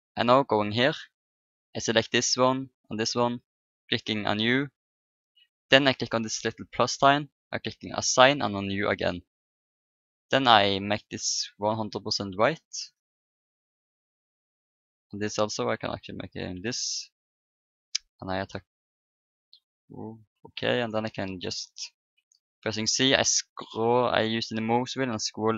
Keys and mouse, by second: 0.6-2.4 drag, 1.7-4.7 right drag, 3.7-5.7 drag, 5.7 middle click, 6.7-11.6 drag, 14.0-18.0 drag, 19.7 a, 22.2 c.